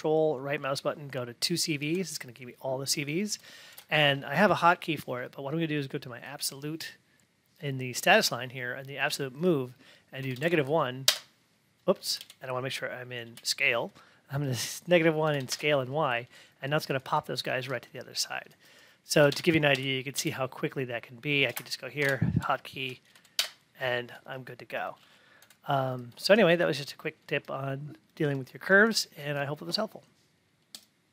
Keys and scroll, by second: 3.7 alt+`, 11.0 Return, 22.0 alt+`, 22.7 Tab, 23.3 Return, 26.1 F8.